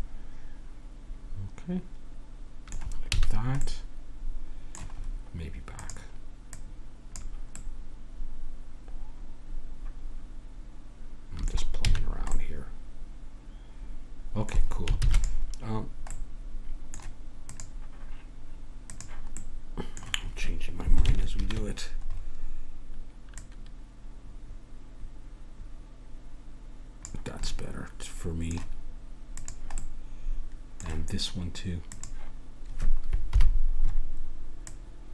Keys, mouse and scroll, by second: 1.1 middle click, 1.9-4.2 middle drag, 3.1 a, 5.8-7.7 drag, 7.7 middle click, 9.6 middle click, 11.8 a, 12.0-14.3 middle drag, 15.0 ctrl+s, 16.2-17.5 middle drag, 17.5-19.4 drag, 19.4-20.7 middle drag, 21.4 ctrl+KP_3, 23.3-24.8 middle drag, 24.8 click, 27.4-29.4 middle drag, 29.4 click, 29.8-31.9 middle drag, 33.3 KP_1.